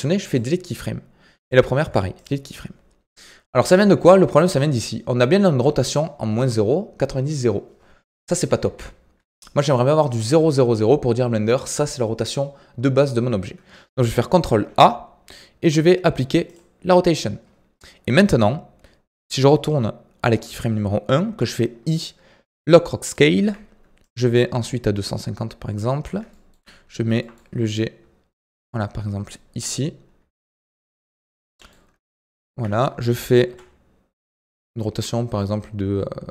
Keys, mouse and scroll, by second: 1.4 click, 1.7 Delete, 3.4-6.4 shift+middle drag, 8.2 KP_1, 8.6 KP_3, 14.2 ctrl+a, 19.4-21.2 drag, 24.0-26.3 drag, 26.3-27.1 shift+middle drag, 27.1 g, 28.6-30.1 middle drag, 30.1 KP_1, 30.5 KP_3, 31.4 g, 33.4 r.